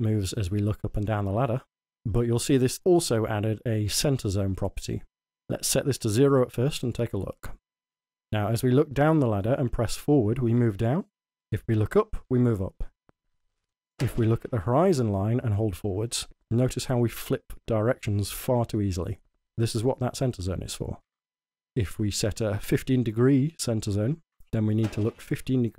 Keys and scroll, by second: 7.9-13.2 typing, 15.5 w.